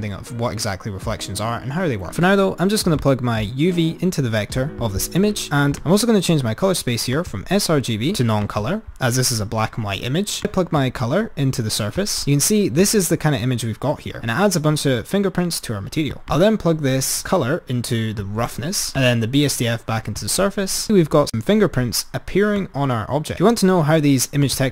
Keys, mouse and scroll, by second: 3.0 click, 5.3-9.3 drag, 10.4 click, 10.8 click, 12.8 click, 16.5 drag, 19.0 drag, 20.9-21.5 drag, 22.7 click, 24.6 click.